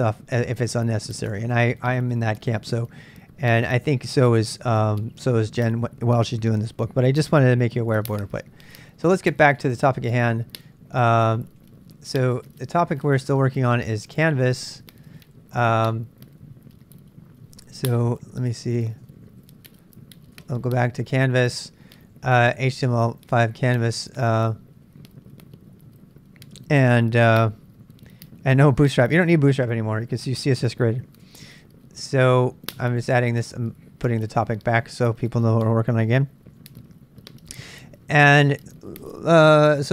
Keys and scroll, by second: 8.7 ctrl+[, 8.8 k, 9.3 k, 10.8-12.1 typing, 12.3 Return, 13.9 n, 15.3 n, 18.1-20.0 typing, 20.4 Return, 21.2-23.9 typing, 31.2 Return, 33.1 ctrl+[, 33.1 ctrl+j, 33.4 z, 33.5 z, 36.6 super+Tab, 38.4 super+Tab.